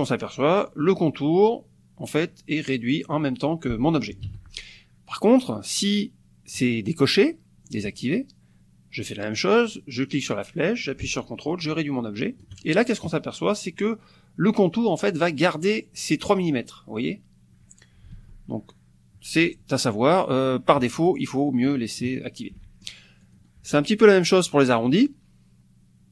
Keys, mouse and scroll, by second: 4.3 ctrl+z, 6.6 click, 9.5-12.7 drag, 18.1 ctrl+z, 21.2 click, 21.7 click, 22.6 click, 23.2 click.